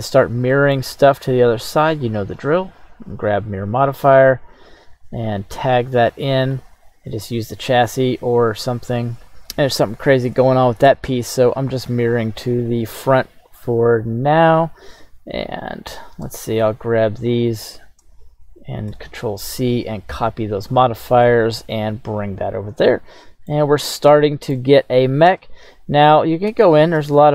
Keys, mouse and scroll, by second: 0.5 middle click, 1.0-1.4 right drag, 2.0 drag, 2.8-5.2 drag, 6.4 click, 13.4 right click, 15.8 right click, 16.6 shift+right click, 17.6 shift+right click, 19.0 ctrl+c, 20.8 right click, 21.2-23.6 middle drag, 24.2-24.5 shift+middle drag, 25.4 right click, 26.5 Tab, 27.0 shift+middle click.